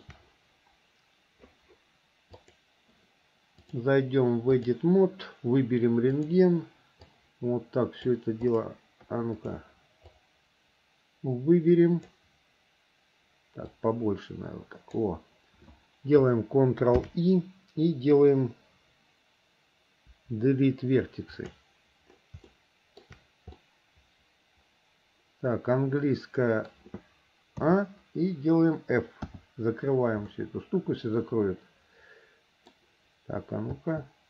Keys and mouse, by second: 2.6 click, 3.8-4.9 drag, 7.3-8.3 drag, 9.5 click, 10.3-12.4 drag, 13.9-15.3 drag, 17.1 ctrl+i, 20.3 Delete, 22.7 shift+middle click, 23.8-25.4 middle drag, 25.5-26.9 middle drag, 27.8 a, 29.4 f, 30.5-31.7 middle drag, 31.7-32.9 drag, 31.7-32.9 right drag, 33.9 f.